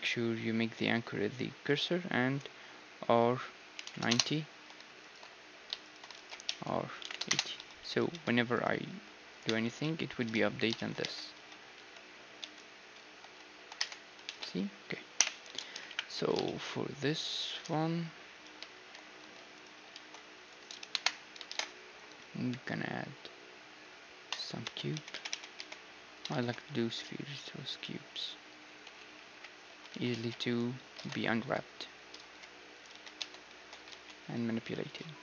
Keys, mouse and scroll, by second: 3.0 r, 5.1-10.4 right drag, 6.1 alt+d, 6.4 r, 7.6 a, 8.1 Tab, 8.9 g, 9.5 Tab, 9.8 click, 10.4 ctrl+z, 10.8-12.7 middle drag, 11.0 Tab, 11.3 a, 11.8 s, 13.8 Tab, 14.3 ctrl+z, 15.2 ,, 15.5 a, 15.9 KP_1, 16.2 z, 16.4 middle click, 16.8 right click, 17.0-19.0 drag, 18.8-21.5 typing, 19.8-22.2 right drag, 24.6 Tab, 24.9 w, 25.3 w, 26.3 alt+shift+s, 27.1 click, 27.8-29.4 middle drag, 28.8 KP_Divide, 29.3 KP_7, 29.7 a, 29.9 z, 30.1 b, 31.0 ctrl+Tab, 32.8 x, 33.1 z, 33.2 Tab, 34.0 s.